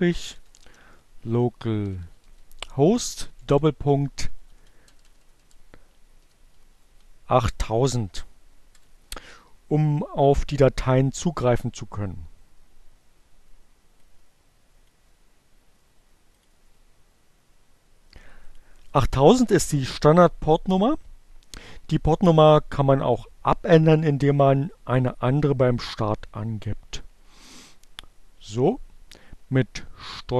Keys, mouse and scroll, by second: 1.3-3.3 typing, 4.4-5.6 typing, 6.8-7.7 typing, 12.7-15.0 drag, 16.4 click, 18.1 click, 25.5 click, 27.8 ctrl+c, 30.1 Up.